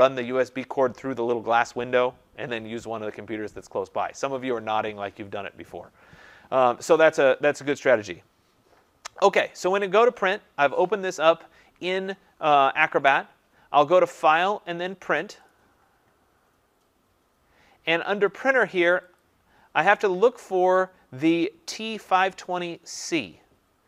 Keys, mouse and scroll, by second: 9.1-9.4 scroll down 2, 14.0 click, 14.4 scroll, 15.3 click, 15.5 click, 19.2 click, 20.8-23.8 drag.